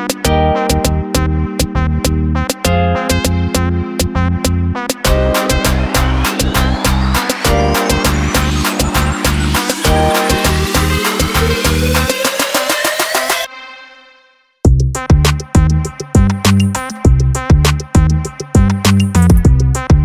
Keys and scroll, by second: 8.7 alt+space, 10.3 alt+space, 11.4 alt+space, 12.2 alt+space, 12.7 alt+space, 17.3 alt+space, 18.0 alt+space.